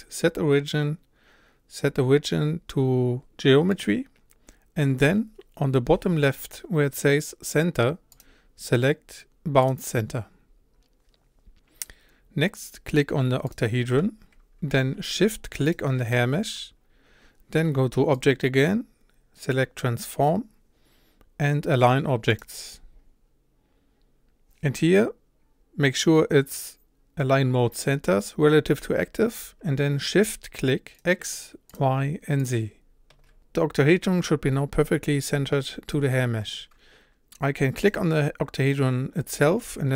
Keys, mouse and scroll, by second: 10.1-13.6 drag, 15.7 shift+click, 30.7-31.4 shift+click, 32.2 shift+click, 32.9 shift+click, 33.4-37.0 shift+middle drag, 37.0-37.3 scroll down 1, 37.3-37.9 scroll up 1, 37.9 click, 39.9 s.